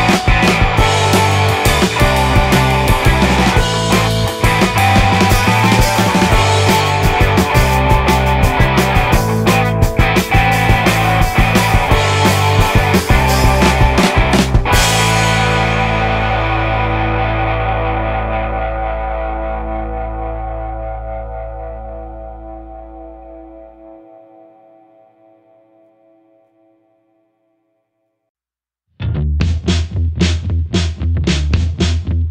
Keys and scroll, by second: 3.2 space, 4.4 space, 4.7 space, 7.0 space, 10.5 ctrl+z, 10.7 ctrl+z, 12.0 ctrl+z, 14.6 space, 16.5 space, 21.7 space, 22.0 ctrl+z, 23.0 space, 25.7 space, 26.4 ctrl+z, 28.7 ctrl+z, 29.8 space, 31.5 space.